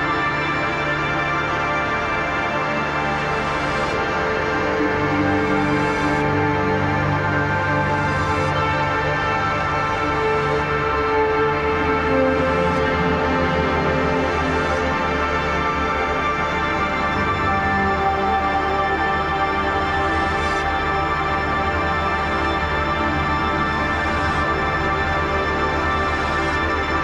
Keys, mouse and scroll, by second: 0.0-0.2 typing, 1.5-4.0 drag, 4.0 click, 5.1 ctrl+=, 5.5 space, 5.7 click, 5.9 space, 6.4 ctrl+=, 6.7 space, 7.0 click, 9.5 click, 11.1 ctrl+g, 11.5 Down, 13.1 click, 14.7 click, 14.9 right click, 15.9 click, 17.2 Up, 18.2 click, 20.6 click, 20.9 shift+click, 21.9 ctrl+g, 23.1-26.5 drag, 24.2 typing.